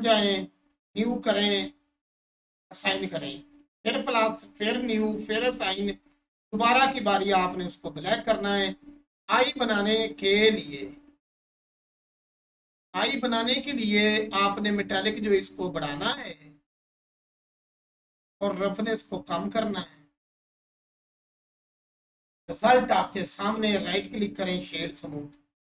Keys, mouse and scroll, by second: 12.7-13.3 scroll down 1, 15.1 click, 18.5-21.0 drag, 22.5 click, 23.8 right click, 24.4 click, 25.0-25.3 scroll down 1.